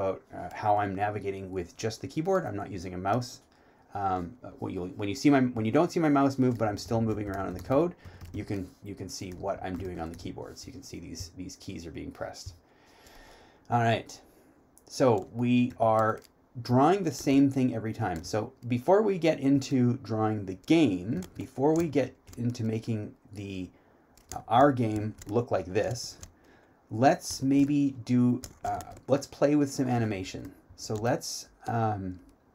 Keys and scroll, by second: 10.8-12.5 typing, 22.0 3, 25.1 3, 27.5 3.